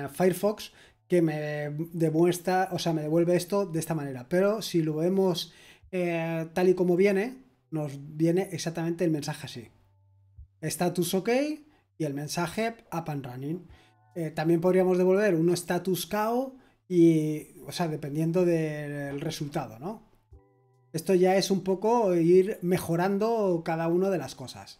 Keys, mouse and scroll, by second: 21.6-22.3 scroll down 1, 22.3-24.2 scroll down 1, 24.2-24.7 scroll down 1.